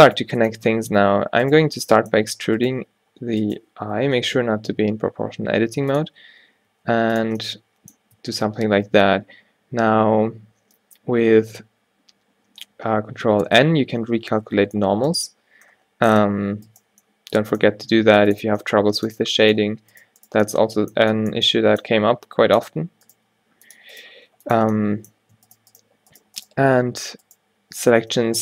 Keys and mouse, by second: 0.1-2.7 drag, 1.1 a, 2.5 e, 2.8 s, 3.9 o, 4.6 s, 6.2 q, 6.8 s, 8.3 a, 8.5 a, 13.6 ctrl+h, 14.4 ctrl+n, 17.9 g, 19.5-22.1 drag, 22.1 g, 23.1-24.8 drag, 23.2 g, 24.3 g, 26.8 g, 28.1 f.